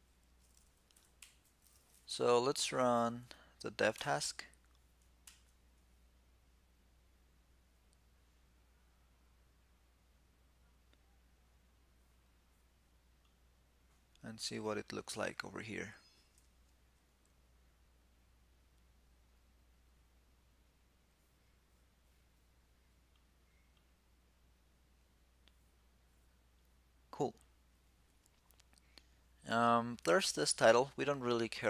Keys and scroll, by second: 0.9 shift+super+t.